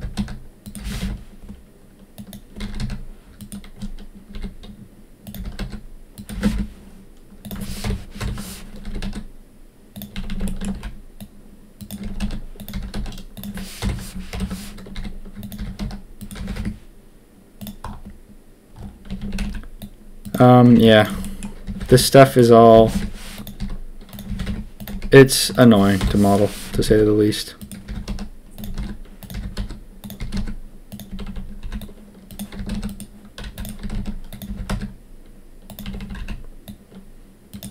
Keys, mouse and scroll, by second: 0.8 g, 2.5 s, 4.3 s, 5.3 g, 6.3 g, 7.8 ctrl+KP_2, 8.1 ctrl+KP_1, 8.8 s, 10.1 a, 10.2 a, 10.4 shift+click, 10.7 c, 12.0 s, 12.7 g, 13.8 ctrl+KP_1, 14.3 ctrl+KP_3, 14.9 s, 15.5 g, 16.3 g, 19.0 a, 19.2 a, 20.2 c, 20.7 c, 21.6 g, 22.7 g, 23.5 s, 24.2 g, 24.8 s, 25.9 ctrl+KP_1, 26.7 s, 27.8-34.4 typing, 35.8 a, 35.9 a, 36.1 c.